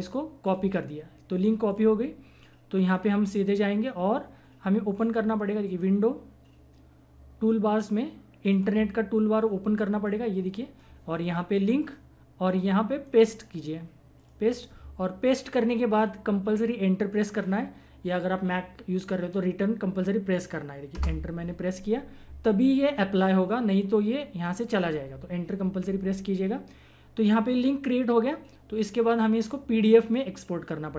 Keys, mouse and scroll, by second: 5.6 click, 8.5 click, 13.1 right click, 14.1 click, 15.9 click, 20.9 Return.